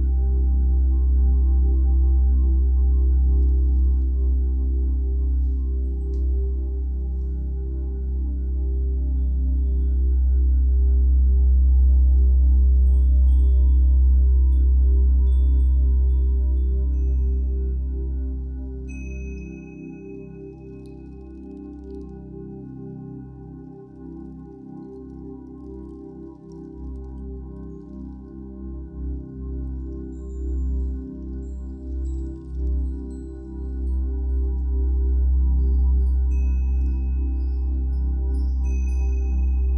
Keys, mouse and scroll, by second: 9.8-12.8 middle drag, 10.2 scroll down 2, 13.9 middle click, 14.7-24.4 drag, 14.7-15.5 scroll up 2, 15.5-16.9 scroll up 1, 24.4-26.3 middle drag, 26.3-33.6 drag, 33.4 scroll down 2, 33.6-36.1 middle drag, 34.2-35.5 scroll up 4, 35.5-36.1 scroll up 1, 36.1-39.7 drag.